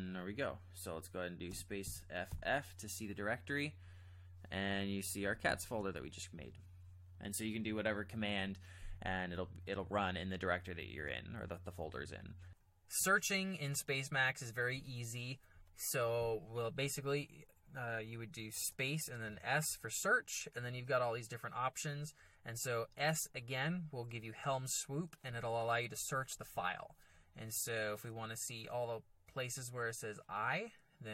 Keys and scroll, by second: 1.5 space, 1.8 f, 2.3 f, 5.3 ctrl+j, 5.5 ctrl+j, 12.4 alt+Tab, 18.6 space, 19.2 s, 23.1 s, 29.9 i.